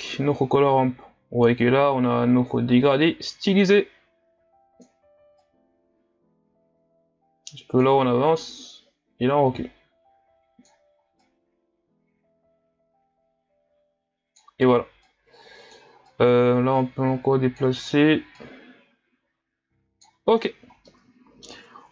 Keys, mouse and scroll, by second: 8.4-14.2 drag, 16.1-20.5 drag, 20.5-20.9 scroll down 1, 20.9-21.7 middle drag, 21.7-21.9 scroll up 1.